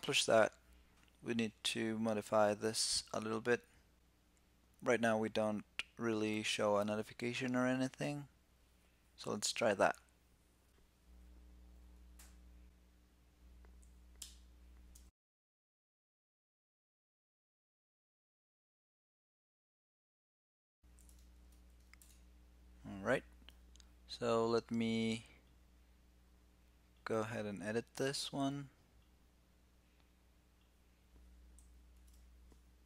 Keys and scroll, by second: 15.8 alt+1, 15.9 super+z, 16.6 alt+c, 17.5 alt+c, 18.4 super+s, 20.1 alt+c, 21.7 super+s.